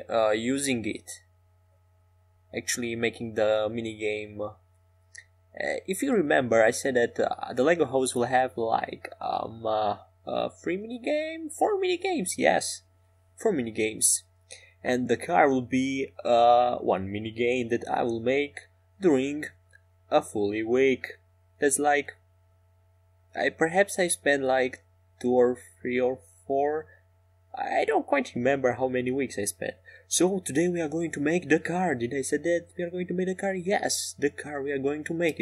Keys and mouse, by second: 1.2 s, 2.8 click, 4.4 ctrl+s, 7.1-11.2 drag, 11.8 KP_5, 11.9 KP_7, 16.6 KP_5, 16.7 KP_7, 18.2 KP_5, 20.1 shift+a, 22.7-26.2 drag, 23.0 s, 27.0 s, 34.5 click, 35.1-35.4 middle drag.